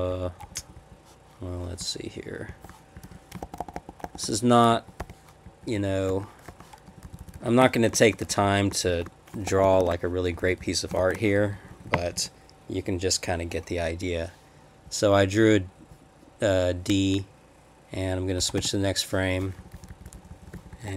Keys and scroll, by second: 0.1 Up, 0.4 Down, 0.6 Down, 0.7 Down, 2.5 shift+\, 3.0 Up, 3.0 Left, 3.4 shift+-, 4.0 shift+-, 4.7 Down, 5.0 \, 5.4 Down, 5.8 Left, 6.5-9.8 typing, 6.9 Left, 7.1 Left, 10.3 Up, 10.4 Left, 10.6 Left, 11.0 shift+-, 11.4 Down, 11.5 Down, 11.7 Down, 11.9 Down, 12.0 Down, 12.1 Down, 18.4 Escape, 18.6 k, 19.6 Up, 19.7 Up, 19.9 Up, 20.0 Up, 20.1 Left, 20.3 Left, 20.5 Left, 20.5 Up, 20.7 Up, 20.8 Right.